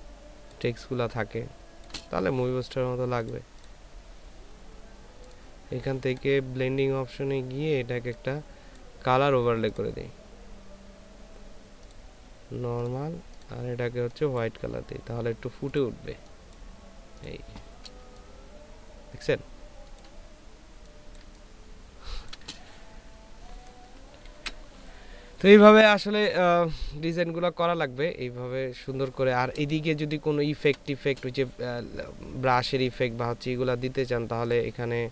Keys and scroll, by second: 0.8 ctrl+space, 18.4 ctrl+space, 21.2 ctrl+space, 24.3 ctrl+s, 30.2 ctrl+space, 33.0 ctrl+space.